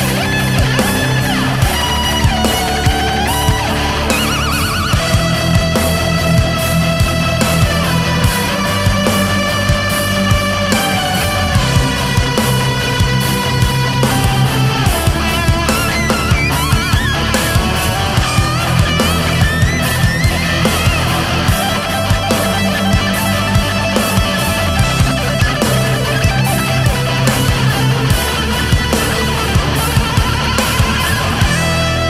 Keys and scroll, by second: 3.6 ctrl+z, 5.1 ctrl+z, 8.7 space, 9.4 ctrl+z, 11.3 space, 13.6 ctrl+z, 15.1 ctrl+z, 16.0 ctrl+z, 16.7 space, 17.2 ctrl+z, 19.8 ctrl+z, 20.4 ctrl+z, 22.1 ctrl+z, 22.9 ctrl+z, 23.9 ctrl+z, 24.3 ctrl+z, 28.2 space, 28.9 space, 29.8 ctrl+z, 30.0 ctrl+z, 31.5 ctrl+z.